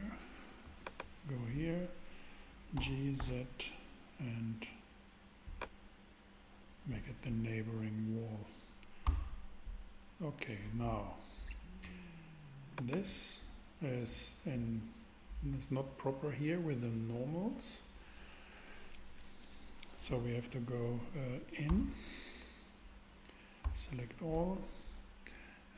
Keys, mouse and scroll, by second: 2.7 super+g, 3.2 z, 9.0 Tab, 12.7-14.6 super+drag, 21.7 Tab, 23.6 a, 24.6 a.